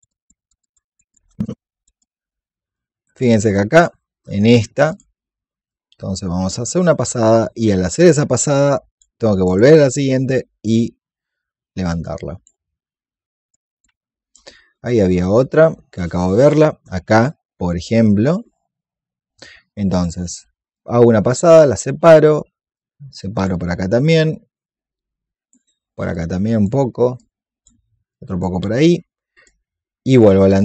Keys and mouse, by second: 0.1 click, 0.4 alt+click, 0.6 click, 1.1 alt+click, 2.0 alt+click, 4.8 alt+click, 5.6 click, 8.4 click, 9.4 alt+click, 10.0 click, 11.8 alt+click, 13.2 click, 14.6-18.4 drag, 19.8 alt+click, 20.6-28.0 drag, 30.0 alt+click.